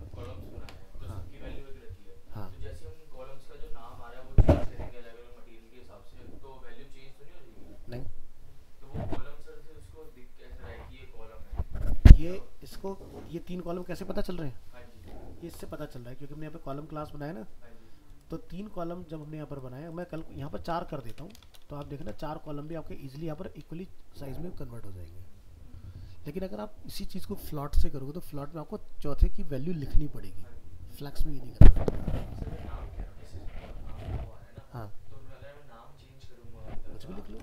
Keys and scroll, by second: 0.2 alt+Tab, 21.1 ctrl+c, 21.4 ctrl+Return, 21.6 ctrl+v, 22.6 alt+Tab, 37.3 alt+Tab.